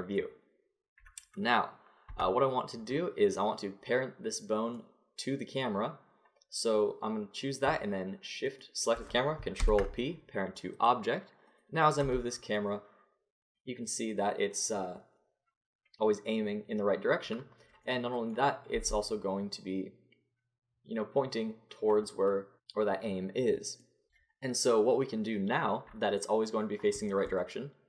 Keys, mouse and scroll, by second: 2.1 Tab, 8.5-9.6 drag, 9.6 ctrl+p, 11.5 click, 12.0 g, 17.6-18.8 middle drag, 18.8 g, 24.4-27.8 middle drag.